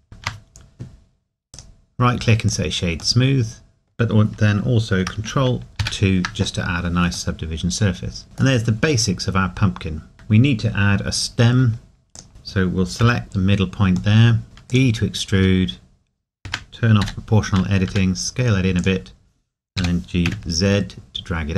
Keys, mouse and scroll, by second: 0.2 Tab, 2.5 click, 3.2 middle click, 7.6 middle click, 8.7-10.1 scroll up 1, 10.1 Tab, 12.1 Tab, 13.0 KP_Decimal, 13.3 scroll down 1, 14.2 middle click, 14.4 e, 14.7 click, 15.4 s, 17.0-17.9 typing, 18.8 click, 19.8 g, 20.9 typing.